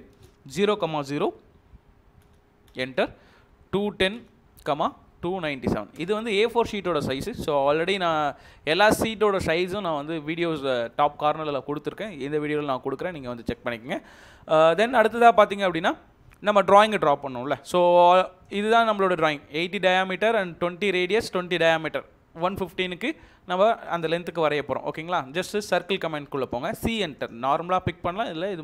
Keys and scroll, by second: 0.0-6.0 typing, 2.7 Return.